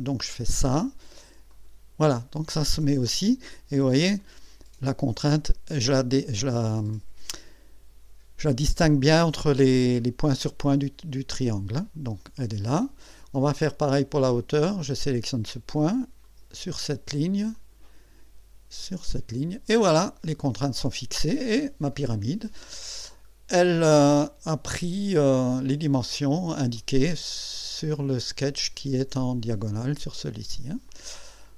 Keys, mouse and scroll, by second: 0.2 click, 1.5 click, 4.2-5.0 drag, 13.6 right click, 15.0 click, 16.2 click, 17.5 click, 18.8 click, 20.7 click, 22.0-29.0 drag, 29.7 click, 30.9-31.5 drag.